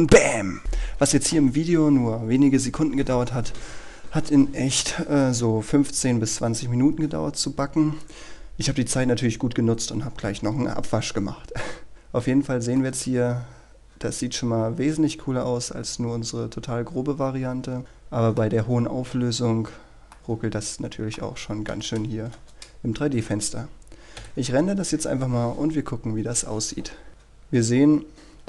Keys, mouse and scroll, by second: 12.2-12.8 scroll up 1, 12.8-19.1 middle drag, 19.3-20.2 scroll down 1, 20.2-22.1 middle drag, 22.5 KP_0, 24.3 F12, 27.1-27.9 scroll up 1.